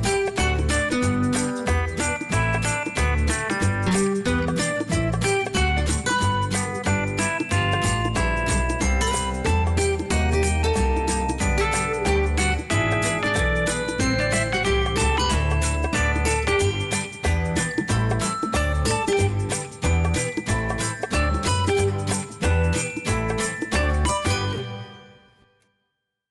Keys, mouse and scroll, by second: 3.2 space.